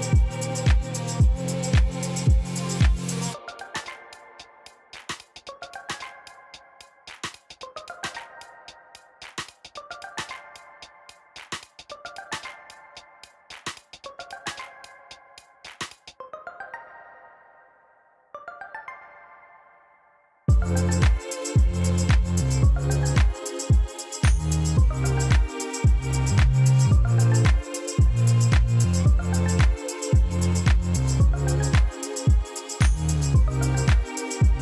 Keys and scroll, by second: 1.5-2.9 typing, 3.5 Return, 8.3 e, 8.9 ., 9.0 1, 10.3 Return, 10.5 ctrl++, 11.2 p, 12.4-13.2 typing, 13.6 Return, 16.0 e, 16.3 ., 16.4 1, 17.1 Return, 17.7 p, 19.8-20.5 typing, 20.8 Return, 22.4 e, 22.7 ., 22.8 1, 23.0 Return, 24.2 p, 26.1-26.8 typing, 27.2 Return, 29.0 ., 29.1 1, 29.3 Return, 29.6 ctrl++, 30.0 p, 32.0-32.7 typing, 33.0 Return, 34.5 shift+e.